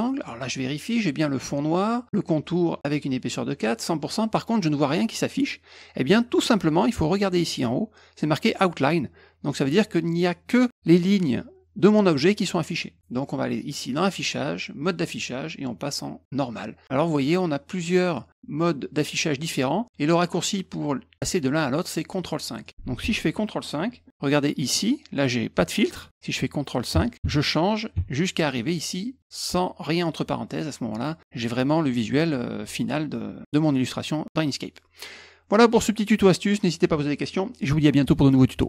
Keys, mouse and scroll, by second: 13.9 click, 22.6 click.